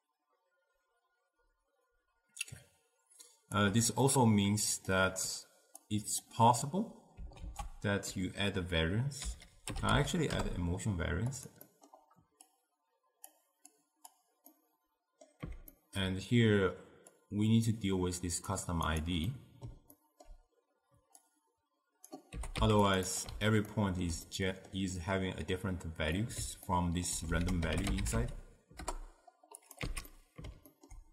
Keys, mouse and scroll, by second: 4.1-5.9 middle drag, 5.9 click, 7.5 ctrl+a, 11.8 middle click, 12.6-14.6 drag, 14.6-17.2 middle drag, 17.2-19.1 drag, 19.4-21.3 middle drag, 21.3-22.4 drag, 22.4 g, 23.2 click, 23.8-27.5 ctrl+middle drag, 27.5 ctrl+a, 30.0 x, 30.2-31.1 middle drag.